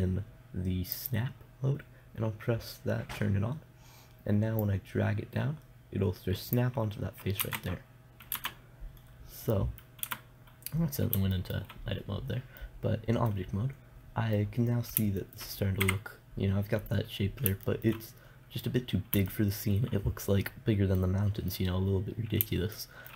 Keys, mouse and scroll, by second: 1.4-3.3 drag, 5.1-6.7 drag, 6.7 middle click, 7.9 Tab, 8.8 shift+Tab, 10.5 Tab, 15.7 middle click, 16.3 KP_0, 19.5-23.1 middle drag.